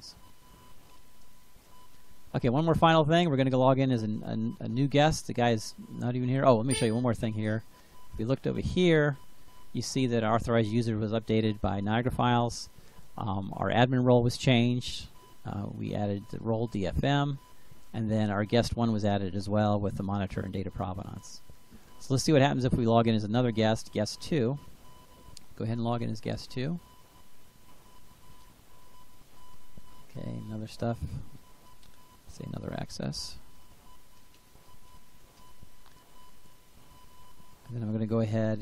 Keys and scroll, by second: 32.1-35.5 typing.